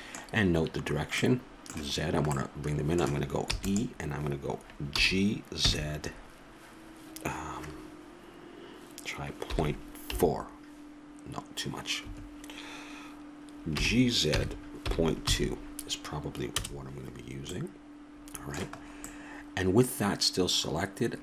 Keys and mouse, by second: 0.1-1.5 middle drag, 3.8 e, 5.3 g, 14.0 g, 17.9 middle click, 19.1 middle click, 19.4-20.7 middle drag.